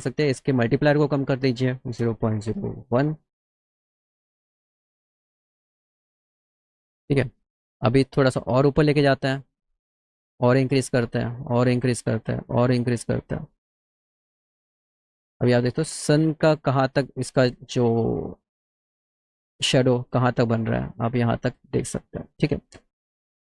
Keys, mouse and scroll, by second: 1.0 click, 2.4 KP_0, 8.3-9.5 drag, 13.1-14.9 drag.